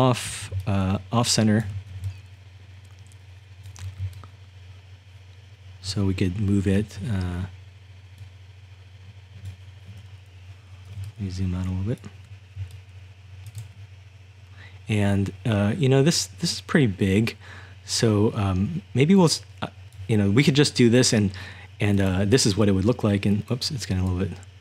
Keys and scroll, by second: 0.0-3.6 typing, 4.9-7.2 typing, 11.0-13.7 typing, 15.0 typing, 19.2-19.9 typing.